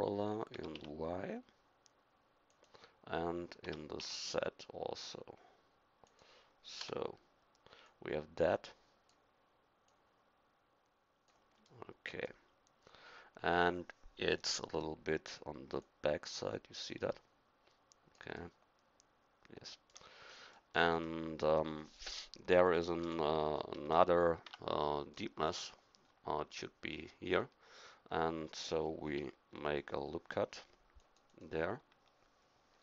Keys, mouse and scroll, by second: 0.5 s, 3.6 s, 6.8 KP_1, 7.8-9.8 drag, 9.9 click, 11.6 middle click, 18.1 middle click, 23.0 KP_1, 24.4 Tab, 29.0 ctrl+r.